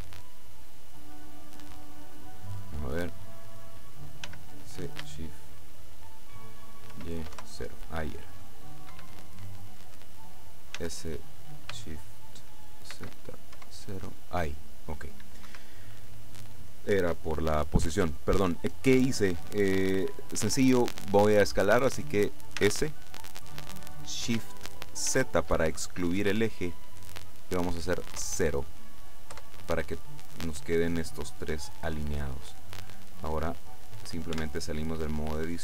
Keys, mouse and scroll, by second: 4.3 s, 7.0 shift+y, 7.4 shift+KP_0, 9.0 Escape, 10.8 s, 13.0 shift+z, 13.6 shift+KP_0, 15.6 Escape, 22.7 s, 25.2 shift+z, 28.2 KP_0, 29.4 KP_Enter, 34.4 Tab.